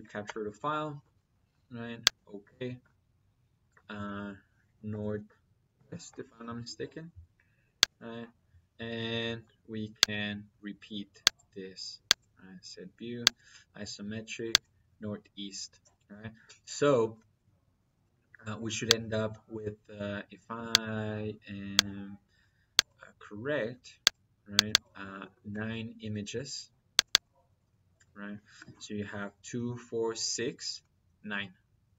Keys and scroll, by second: 0.1 Return, 4.7 n, 5.6 w.